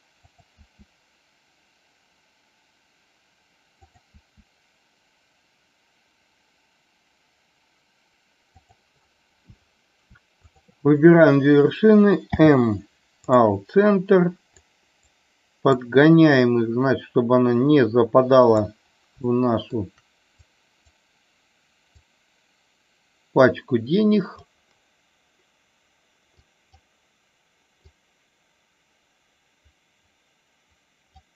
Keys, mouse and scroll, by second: 8.5 click, 14.7 click, 15.8-18.5 drag, 19.3 shift+middle click, 20.4 click, 21.9-24.4 drag, 26.4 click, 27.9-31.2 drag.